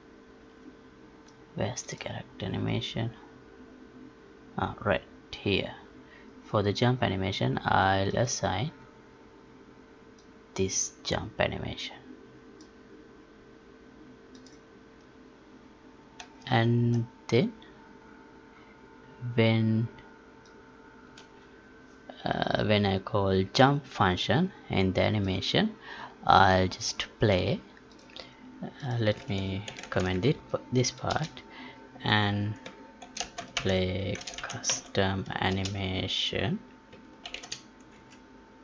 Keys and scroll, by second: 16.3 alt+Tab, 29.7 ctrl+k, 30.3 Right.